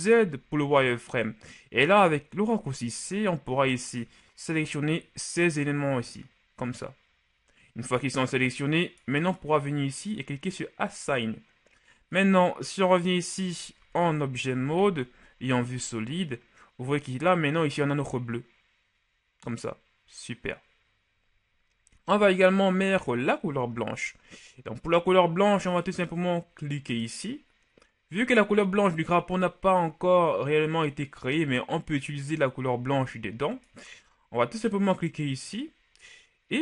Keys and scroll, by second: 0.2 z, 2.6 c, 14.8 z, 15.5 z.